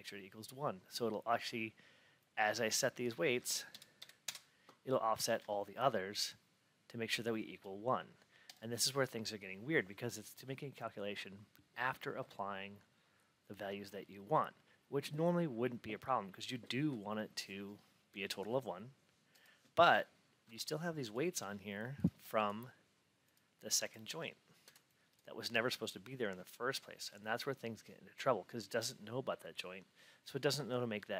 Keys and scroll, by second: 4.1 Return, 20.4 F8.